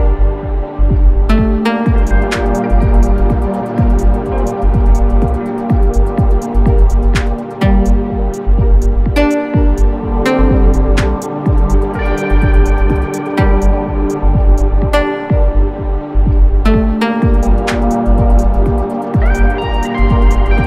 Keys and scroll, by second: 1.9 3, 2.7 ], 3.2 ], 4.3 4, 4.7 3, 5.2 ], 6.2 4, 8.5-13.3 typing, 14.8 4, 15.4 3, 15.9 ], 17.0 4, 18.5-20.6 typing.